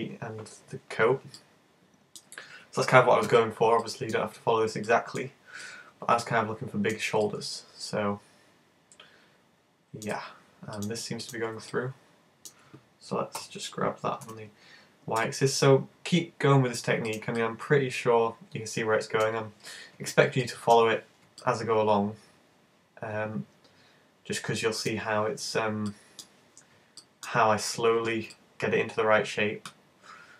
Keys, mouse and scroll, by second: 1.4 middle click, 3.3 `, 3.8 middle click, 4.3-4.9 scroll up 5, 4.9 shift+middle click, 5.6 middle click, 7.2 middle click, 10.8 right click, 11.4 shift+right click, 11.7 middle click, 13.4 g, 17.2 click, 17.4 middle click, 20.4 middle click, 21.4 middle click, 25.9 middle click, 27.1 middle click, 28.3 middle click.